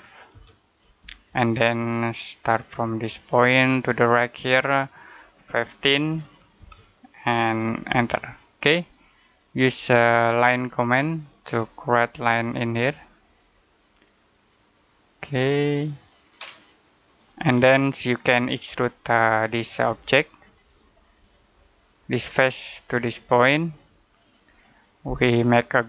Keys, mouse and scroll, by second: 0.2 5, 0.9 Return, 3.1 click, 5.9 1, 7.8 Return, 8.7 middle click, 11.0 click, 17.3-17.6 scroll down 1, 17.6 middle click, 20.5 click.